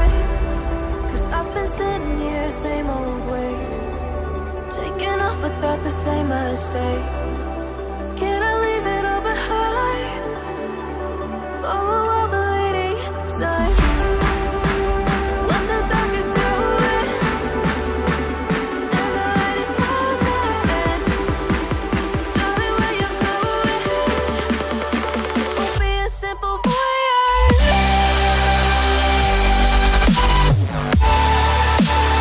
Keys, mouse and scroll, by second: 0.4 right click, 1.2 right click, 2.9 double click, 8.0 double click, 14.9 ctrl+shift+click, 16.4 ctrl+shift+click, 18.3 ctrl+shift+click, 19.3 ctrl+shift+click, 20.3-21.0 ctrl+scroll up 1, 21.4 ctrl+shift+click, 25.6 ctrl+scroll down 1, 28.4 right click, 30.9 right click.